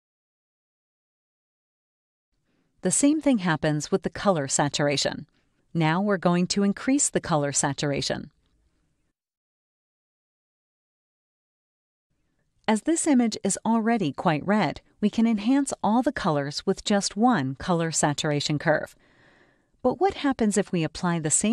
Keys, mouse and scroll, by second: 1.8 click, 2.1 right click, 5.2 click, 6.5 right click, 7.9 click, 10.4 click, 10.4 right click, 11.9-13.2 drag, 16.1 scroll down 2, 17.9 space, 18.0-19.1 drag.